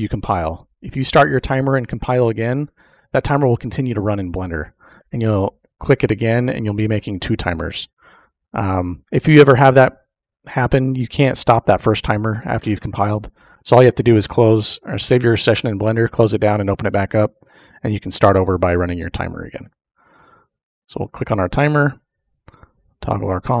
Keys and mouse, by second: 20.6 click, 22.1 click, 23.1-23.6 drag.